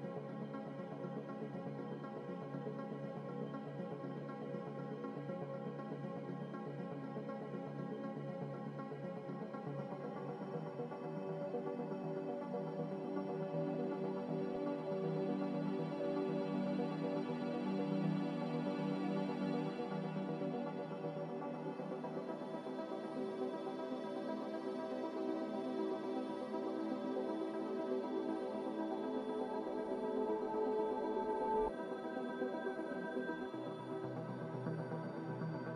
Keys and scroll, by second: 17.9 r, 20.4 a, 23.3 Escape, 24.0 a, 28.6 ctrl+c, 28.8 ctrl+v, 30.1 ctrl+c, 30.2 ctrl+v, 32.0-32.7 typing.